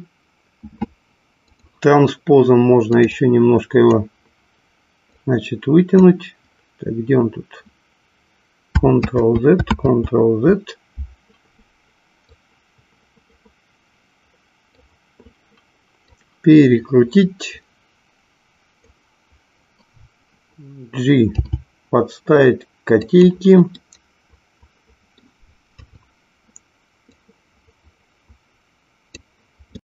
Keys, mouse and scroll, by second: 1.5 click, 2.9 click, 3.2 click, 5.0-6.2 drag, 9.0 ctrl+z, 9.9 ctrl+z, 12.2-14.9 drag, 16.1-18.9 drag, 21.4 g, 23.1 click, 23.9 scroll up 1, 24.0-25.5 middle drag, 26.0 KP_3, 27.1-29.2 drag.